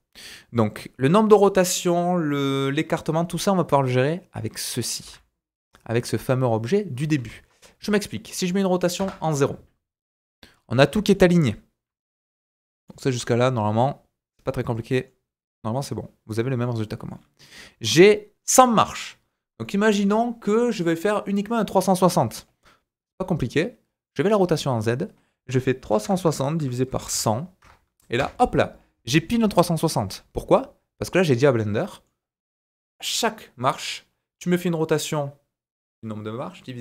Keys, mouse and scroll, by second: 4.0-10.5 drag, 5.0 r, 8.0-10.5 middle drag, 8.0-10.5 right drag, 10.5-11.0 scroll up 4, 11.1 shift+middle click, 11.7 scroll down 1, 11.9 shift+middle click, 12.8 shift+middle click, 13.2 middle click, 14.0-17.5 middle drag, 17.5-22.3 drag, 19.6 shift+middle click, 22.3 middle click, 22.4-32.3 drag, 24.0-32.3 middle drag, 24.0-32.3 right drag.